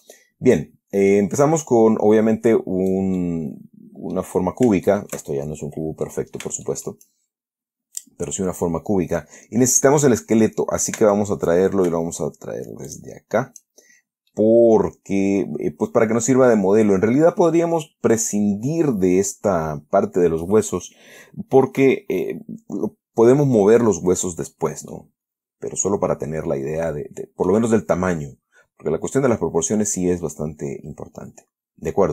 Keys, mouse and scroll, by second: 2.0-3.4 drag, 3.5-4.7 middle drag, 4.8 scroll up 2, 5.2 shift+middle click, 5.5 shift+click, 6.4 click, 7.0 shift+click, 11.3 Tab, 13.2 shift+click, 14.2-17.2 shift+scroll down 2, 14.6 click, 17.2-17.5 scroll up 1, 17.5-17.9 scroll down 2, 25.2 click, 25.3 scroll down 2.